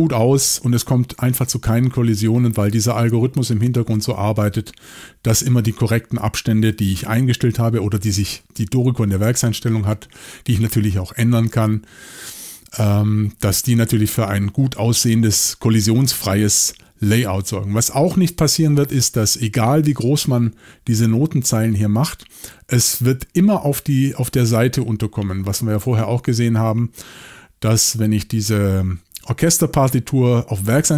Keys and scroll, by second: 0.7 typing, 6.6 y.